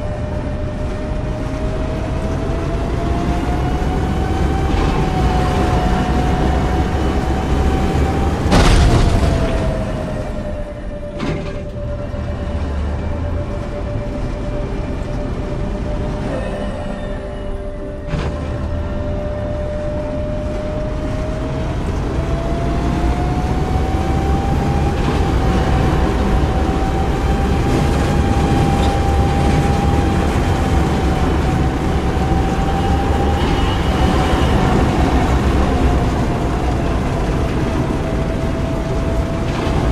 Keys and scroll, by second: 4.5 e, 5.0 a, 10.3 s, 11.0 q, 11.5 w, 13.1 a, 16.1 s, 17.4 e, 17.9 w, 18.4 e, 25.6 d, 27.0 w, 27.8 d, 29.5 d, 33.2 e, 33.8 d, 39.3 q.